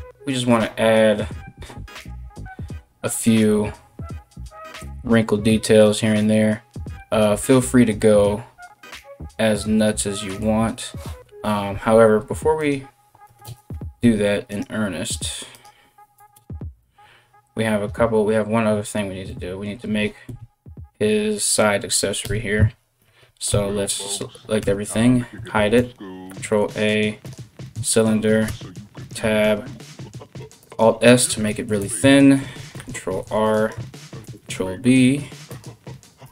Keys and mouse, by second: 10.8 KP_1, 14.1 right click, 19.8 KP_3, 21.8 KP_1, 23.1 a, 24.2 h, 25.1 shift+a, 28.1 Tab, 28.7 alt+s, 30.3-36.3 middle drag, 32.6 ctrl+r, 33.8 ctrl+b, 35.8 e.